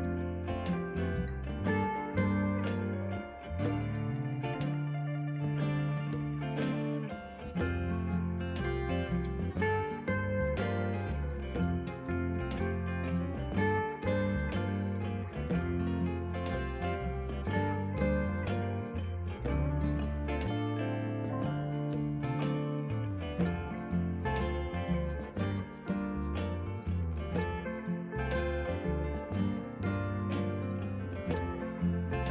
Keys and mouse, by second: 2.7 right click, 3.0 click, 3.2 g, 3.4 Return, 4.3 click, 5.8 click, 6.0 ctrl+w, 6.9 click, 8.0 click, 8.3 ctrl+w, 8.5 click, 9.5 ctrl+1, 10.4 click, 14.4 a, 14.5 click, 14.8 KP_2, 14.9 Return, 15.1 click, 16.0 right click, 16.4 click, 16.8 click, 17.2 KP_9, 17.7 click, 18.0 alt+x, 18.4 alt+y, 19.1 click, 21.0 shift+click, 21.5 KP_9, 21.6 Return, 22.2 click, 22.5 ctrl+1, 22.6 click, 24.3 Escape, 24.6 click, 25.2 click, 25.5 KP_9, 25.6 Return, 25.9 click, 26.6 click, 26.9 KP_9, 27.1 ctrl+1, 27.2 click, 29.5 KP_2, 29.5 Return, 30.7 ctrl+shift+x, 31.3 ctrl+z, 31.5 1, 31.6 click, 31.8 click, 32.1 ctrl+click.